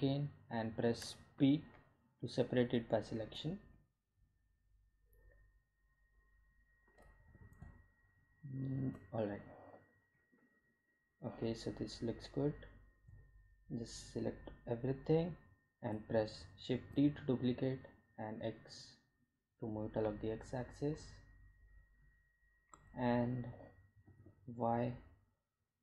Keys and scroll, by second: 0.2 Tab, 2.3 p, 4.4 Tab, 8.9 g, 9.0 z, 19.4 shift+d, 19.8 x.